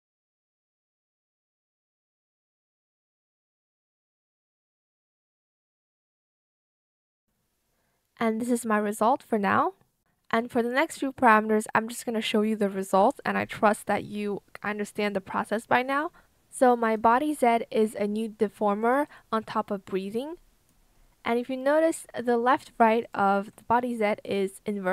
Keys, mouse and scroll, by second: 0.3 ctrl+z, 1.4 shift+click, 2.1 shift+click, 2.3 ctrl+z, 2.5 shift+click, 2.7 shift+click, 4.4 Return, 7.1 Return.